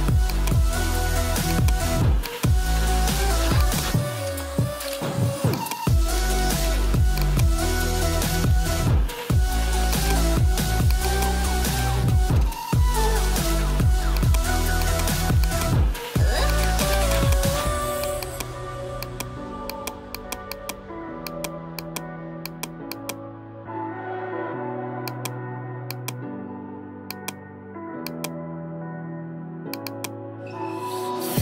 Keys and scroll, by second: 7.9-8.8 typing, 12.3-13.3 typing, 31.1-31.4 typing.